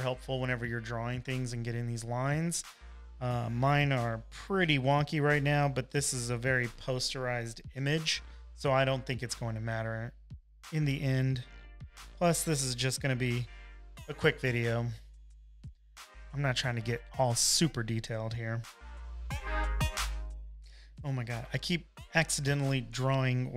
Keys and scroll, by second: 8.8 space, 10.2 super+z, 10.5 space, 11.1 space, 11.2 space, 22.4 super+z, 22.6 space, 23.0 space, 23.1 space.